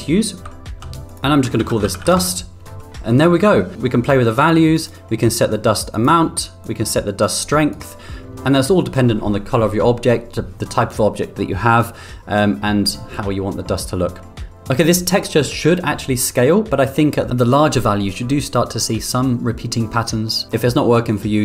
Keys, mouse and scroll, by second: 0.9 ctrl+z, 1.0-3.2 drag, 4.3 click, 5.3 click, 6.6-7.8 drag, 8.3 middle click, 17.6 click.